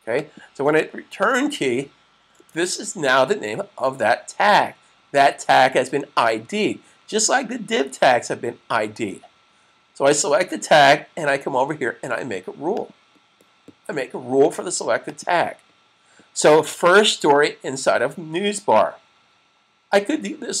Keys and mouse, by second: 0.0 click, 2.2 super+click, 9.8 click, 12.4 click, 19.8 click.